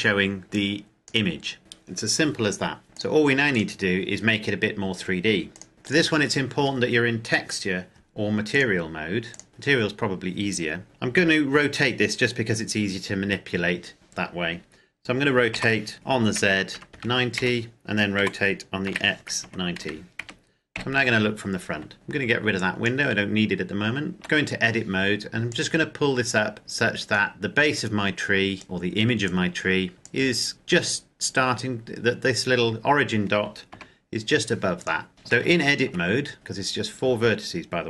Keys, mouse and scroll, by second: 0.4 click, 2.8 click, 4.2-5.3 scroll down 1, 5.3 click, 8.3 click, 10.8 KP_7, 15.2 r, 16.0 z, 16.5 KP_9, 16.9 KP_0, 17.1 KP_Enter, 17.9-20.5 typing, 19.9 KP_Enter, 22.3 click, 23.2-23.6 scroll up 1, 23.6-24.1 scroll down 1, 24.1 Tab, 25.3 click, 27.1 scroll up 1, 28.3 click, 30.6-31.5 scroll up 1, 33.4 g, 34.5 click, 35.0 scroll down 1, 35.1 Tab, 35.4 shift+middle click, 35.7-36.7 scroll down 1, 37.1-37.8 scroll up 1.